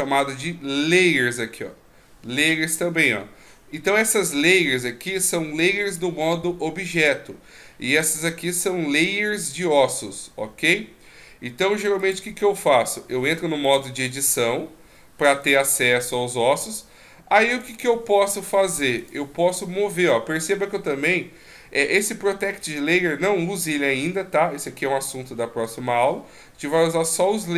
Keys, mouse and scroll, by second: 12.0 click, 15.4 right click, 16.5 right click, 17.5 right click, 18.4 right click, 19.0 right click, 19.5 right click.